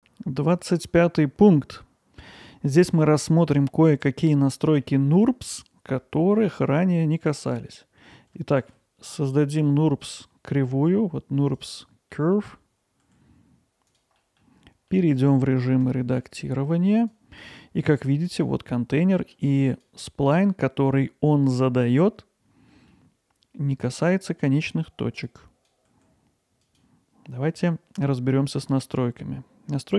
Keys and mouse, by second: 2.3-2.9 middle drag, 4.8-8.0 middle drag, 8.6 shift+a, 12.1 middle click, 13.0 g, 14.2 middle click, 14.9 middle click, 15.9 Tab, 15.9 g, 16.2 middle click, 17.1 click, 17.8 g, 18.3-19.3 drag, 19.3 g, 22.9 middle click, 25.4 click, 25.9 g, 26.6-29.0 drag.